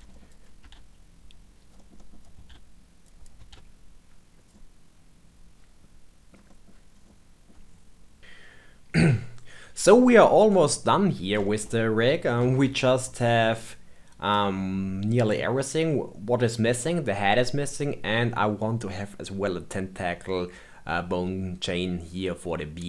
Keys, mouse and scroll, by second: 0.0 shift+middle click, 0.2 click, 0.4 click, 0.6 ctrl+r, 1.7 middle click, 2.1 click, 2.4 ctrl+r, 3.2 click, 3.4 ctrl+r, 4.5-5.2 middle drag, 6.3 scroll down 2, 6.4 middle click, 6.9 scroll up 2, 7.0-7.8 middle drag, 10.0-10.6 shift+middle drag, 10.6-11.4 scroll down 4, 11.4-18.7 shift+middle drag.